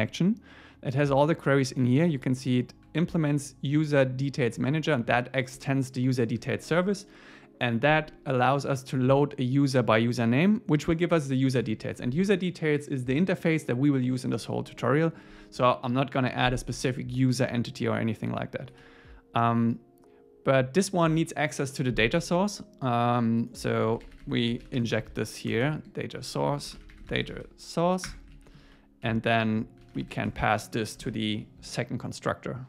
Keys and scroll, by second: 18.8 super+w, 28.1 Return, 28.4 super+Right, 28.6 Left, 29.1 Right, 30.3 Tab, 31.1 super+s.